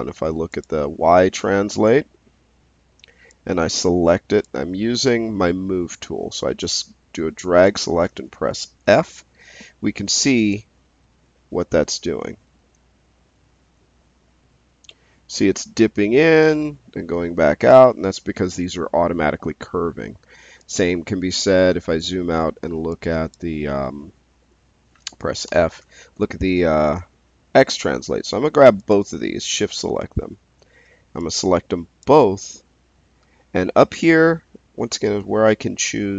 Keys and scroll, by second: 8.8 f, 25.4 f.